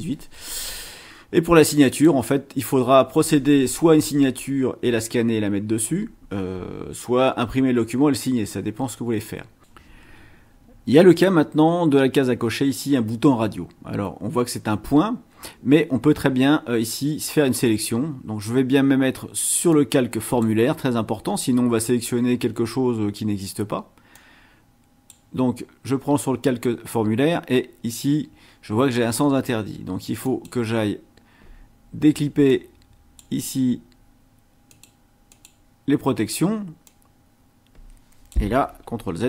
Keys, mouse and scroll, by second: 1.9 click, 8.8-9.1 scroll up 2, 19.7 click, 24.1-25.3 drag, 27.9-29.1 drag, 30.3 click, 32.5 click, 34.7 click, 35.3 click, 36.9-38.5 drag.